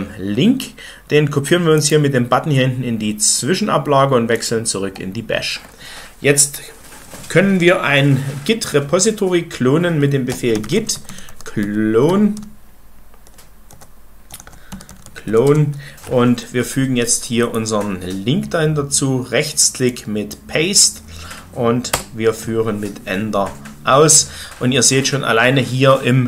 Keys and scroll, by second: 9.9-15.7 typing, 21.9 Return.